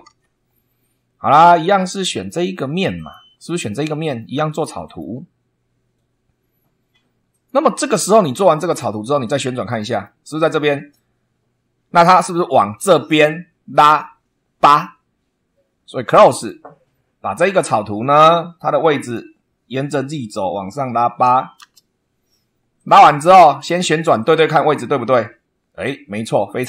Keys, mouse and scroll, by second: 0.0 super+2, 2.9 click, 4.8 click, 7.2 click, 8.4 click, 9.3 middle click, 16.3 click, 18.9 click, 20.8 8, 21.5 Return, 22.7 click, 23.9 click, 24.9-25.9 middle drag, 25.9 right click, 26.5 middle click.